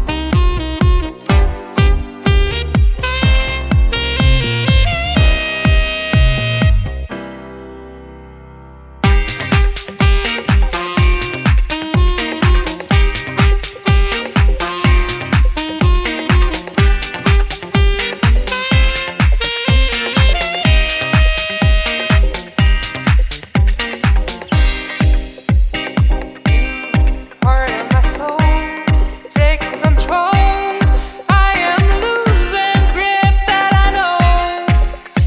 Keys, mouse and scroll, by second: 0.6-1.0 scroll down 2, 0.9 middle click, 1.4 click, 3.6 click, 4.0 scroll up 1, 5.1 click, 5.1 scroll up 3, 5.8 middle click, 6.5 scroll up 2, 7.1-7.6 scroll up 4, 7.7 click, 10.9 click, 12.1-12.9 scroll down 6, 12.5 click, 13.1 middle click, 14.4 scroll up 4, 15.2 KP_1, 16.0 click, 17.3-18.0 scroll down 1, 23.7 click, 24.3 scroll down 4, 24.6 middle click, 24.6 scroll up 1, 24.9 scroll down 1, 25.1 scroll up 1, 25.7 scroll up 3, 25.7 click, 26.9 scroll up 2, 27.7 click, 28.3 scroll up 1, 28.6 middle click, 29.2 scroll up 1, 29.5 click, 33.3 scroll down 1, 33.6 click.